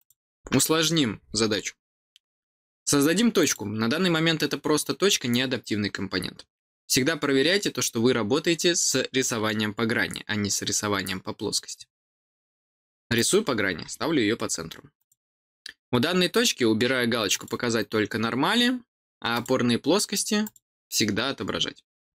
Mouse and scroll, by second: 3.3 click, 13.1 click, 14.9 click, 17.3 click, 19.3 click, 20.4 click.